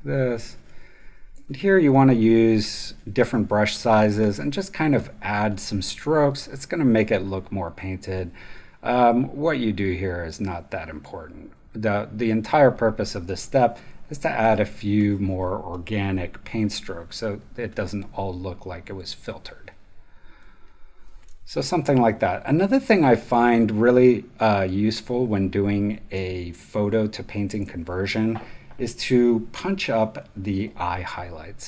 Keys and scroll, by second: 21.2 space, 26.1 space.